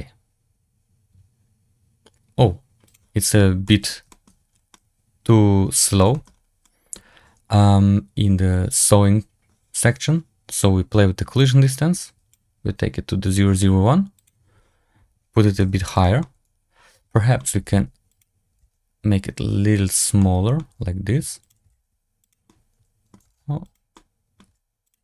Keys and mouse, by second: 2.8-3.2 drag, 3.6 middle drag, 4.0 shift+middle drag, 4.6-5.9 middle drag, 6.0 shift+middle drag, 6.5-6.8 middle drag, 11.5 click, 15.4 g, 16.1-17.4 drag, 17.4 s, 18.4 g, 20.1 middle click, 20.5 s, 21.5 g, 22.5 middle click, 23.1 s, 23.9-24.3 drag, 24.4 g.